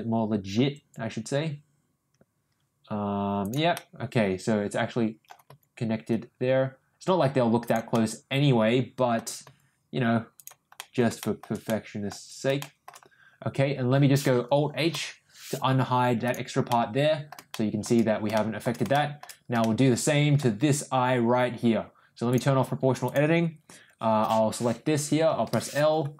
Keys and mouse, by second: 3.7-5.2 middle drag, 5.4 g, 7.9-9.1 middle drag, 9.4 g, 10.7 middle click, 11.1 middle click, 11.6 middle click, 12.5 shift+middle click, 14.9 alt+h, 16.2 click, 16.6 middle click, 17.5 middle click, 18.3 middle click, 18.9 shift+middle click, 19.6 shift+middle click, 22.3 click, 23.0 click, 25.4 l.